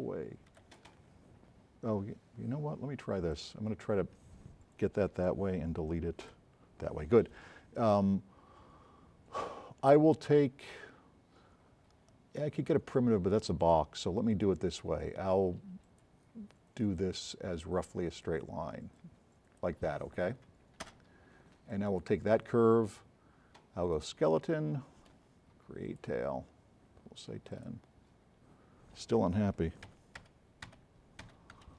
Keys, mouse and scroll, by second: 0.6 z, 3.3-3.9 middle drag, 15.9-16.2 drag, 17.0 click, 21.0 space, 21.7 drag, 27.6 click, 29.9 z, 30.8 z, 31.2 z.